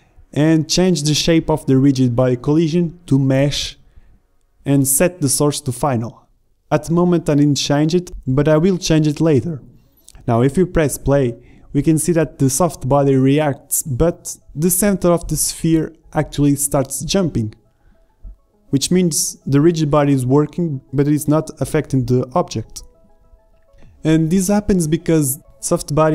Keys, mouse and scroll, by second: 3.8-5.1 drag, 5.5-8.3 middle drag, 8.3-10.4 drag, 8.9 alt+a, 26.0 alt+a.